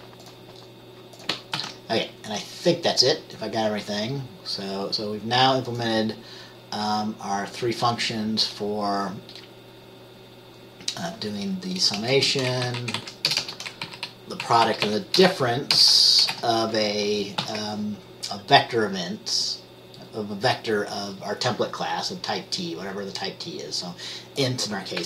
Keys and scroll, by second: 1.7 ctrl+s, 12.1 BackSpace, 12.3 BackSpace, 12.8 Down, 12.9 Right, 13.1 Right, 13.4 BackSpace, 13.5 BackSpace, 14.0 Down, 14.6 Right, 14.8 Right, 15.0 Right, 15.3 BackSpace, 15.9 BackSpace, 16.4 BackSpace, 16.5 c, 17.5 ctrl+s, 17.5 typing.